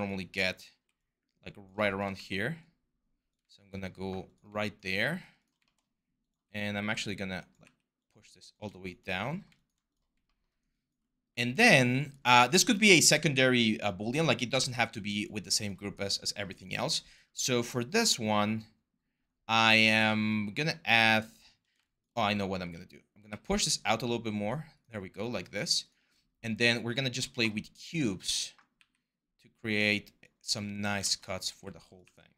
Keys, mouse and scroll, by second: 0.4 r, 1.9 w, 6.5 r, 7.4 w, 22.4 r, 23.1 w, 28.6 w, 30.6 r, 31.3 r, 31.8 w.